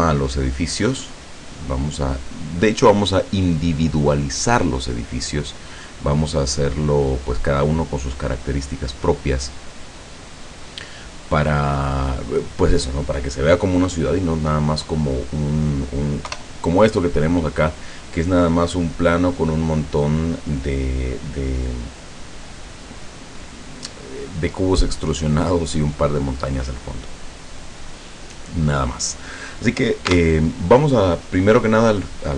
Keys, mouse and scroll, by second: 1.0-2.9 middle drag, 5.3-7.3 middle drag, 8.9 right click, 16.3 KP_0, 26.6-28.1 middle drag, 28.5 right click, 30.1 Tab.